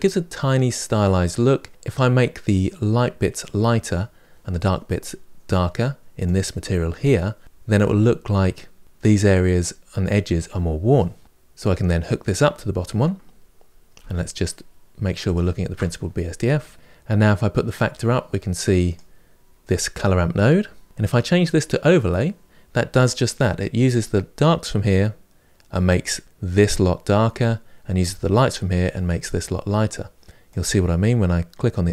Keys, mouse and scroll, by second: 6.0-12.6 drag, 15.1-16.7 ctrl+shift+drag, 17.4-20.2 drag, 20.8-31.9 drag.